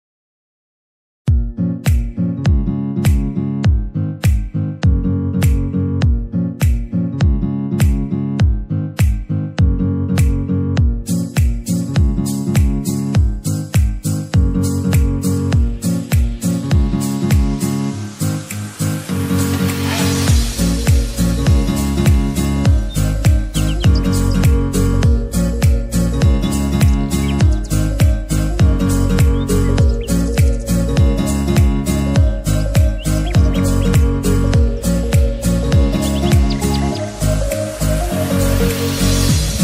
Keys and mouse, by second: 4.0 ctrl+Return, 7.2 ctrl+Return, 8.0 ctrl+j, 9.4 ctrl+z, 16.2 click, 17.5 ctrl+d, 19.7 click, 24.5-29.6 drag, 29.9-35.9 drag, 36.3 Left.